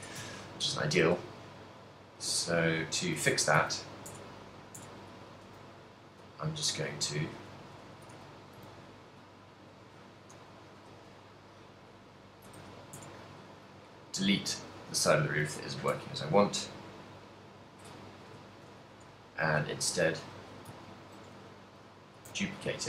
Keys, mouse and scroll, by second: 0.0 Tab, 0.4 ctrl+middle click, 1.0 z, 1.3 middle click, 2.5 right click, 3.4 a, 3.6 a, 4.3 Tab, 4.4 right click, 4.9 Tab, 5.6-8.7 typing, 9.9 a, 10.4 l, 10.9 x, 12.9 z, 13.1 Tab, 13.5 right click, 14.1 middle click, 15.4 g, 15.9 right click, 16.0 ctrl+middle click, 17.3 middle click, 18.3 KP_1, 20.0 alt+d, 20.6 right click, 20.9 ctrl+m, 21.9 click, 22.2 g.